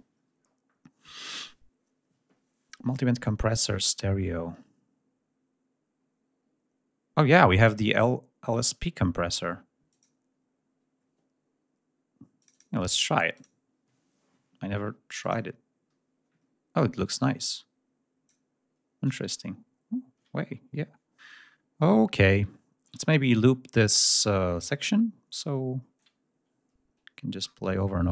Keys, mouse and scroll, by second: 9.7 click, 12.2 click, 13.2 click, 14.9 click, 17.0-18.3 drag, 21.2 ctrl+scroll down 1, 22.3-23.3 ctrl+scroll down 2, 24.1-24.9 ctrl+scroll down 2, 25.2-25.5 ctrl+scroll up 1, 25.6 ctrl+scroll down 1, 25.9-26.3 ctrl+scroll up 1, 27.3-28.1 ctrl+scroll down 5.